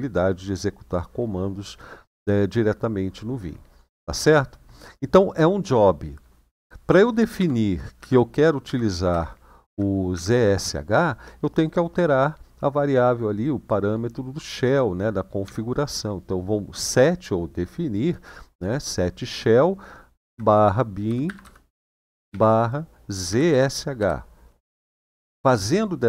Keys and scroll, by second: 7.2 shift+;, 7.7 Up, 8.4 Up, 8.9 Up, 9.4 Up, 9.9 Up, 15.2 =, 20.0-22.0 typing, 23.0-23.7 typing, 24.5 Return.